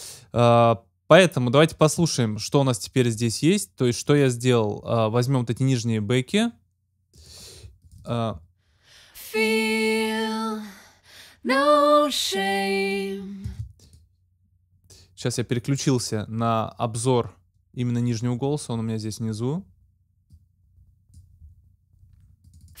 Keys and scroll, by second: 13.3 space.